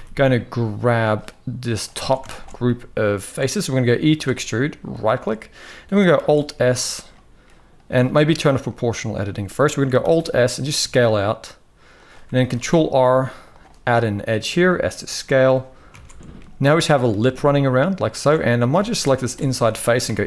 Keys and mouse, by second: 1.5 click, 1.7 alt+a, 2.0 alt+shift+click, 2.3 middle click, 3.9 e, 5.9 alt+s, 8.4 click, 9.7 alt+s, 12.2 ctrl+r, 13.7 middle click, 14.2 s, 15.6 alt+a, 16.1 middle click, 17.8 alt+shift+click, 18.2 middle click, 18.5 alt+a, 19.3 middle click, 19.8 e.